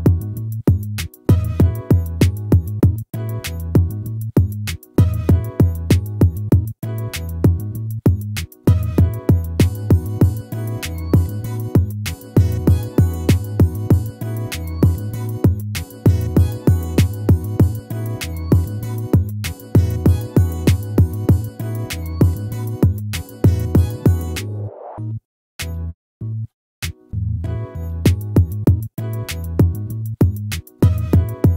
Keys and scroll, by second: 4.7 ctrl+-, 10.1 ctrl++, 22.0 ctrl+-.